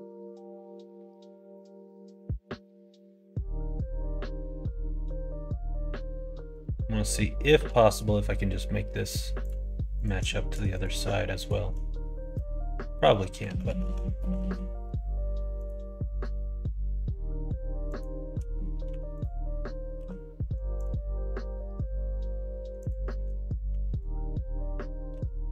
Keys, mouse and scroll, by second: 6.5 click, 7.5 e, 9.9 click, 11.4 shift+click, 12.3 f, 13.1 middle click, 13.4 ctrl+z, 13.6 ctrl+z, 13.8 ctrl+z, 14.1 ctrl+z, 14.3 ctrl+z, 15.5 click, 17.8 click, 18.8 3, 19.1 click, 19.9 x, 22.7 click, 23.0 middle click, 23.6 2, 25.1 e.